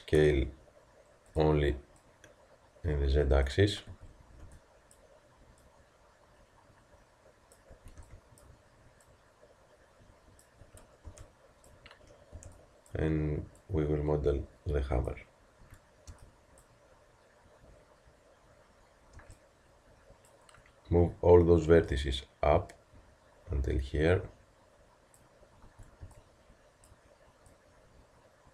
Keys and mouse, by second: 2.0-3.9 drag, 3.9 a, 5.6-7.5 drag, 7.7 a, 9.0-12.3 drag, 10.6 a, 12.3 b, 13.6-15.6 drag, 15.6 a, 19.1 b, 21.9-23.8 drag, 25.7 a, 27.5-28.5 drag.